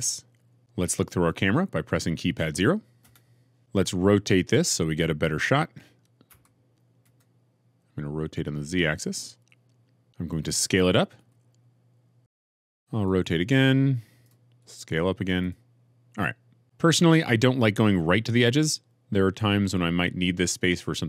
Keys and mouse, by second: 3.0 KP_0, 6.2 r, 7.0 z, 11.2 s, 12.9 r, 13.1 z, 14.5 s, 15.3 click.